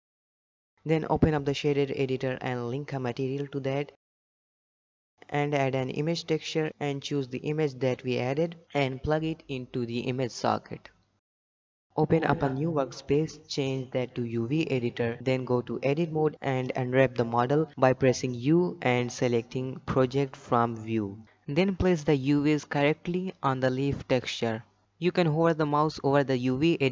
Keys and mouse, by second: 0.1 shift+middle click, 0.3 Tab, 1.4 click, 1.9 ctrl+shift+z, 2.0-2.7 drag, 3.6 click, 4.3 n, 5.1-6.3 drag, 6.6 middle click, 6.9 middle click, 7.0 shift+a, 8.8-10.1 drag, 10.2 click, 10.6-11.2 drag, 11.9 click, 13.0 click, 14.2 click, 17.6 Tab, 18.5 u, 21.6 shift+middle click, 22.6 g.